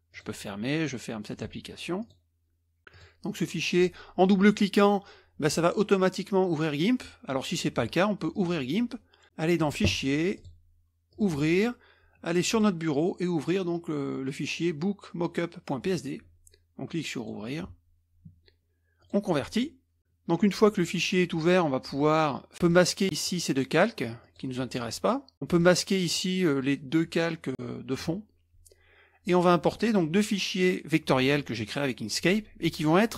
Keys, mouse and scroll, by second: 0.1 click, 1.3 drag, 2.0 click, 2.9 click, 8.3 click, 10.3 click, 11.1 click, 12.5-12.9 drag, 15.8-16.4 drag, 17.2 click, 19.0 click, 23.2 click, 24.2 click, 25.5 click, 26.1 click.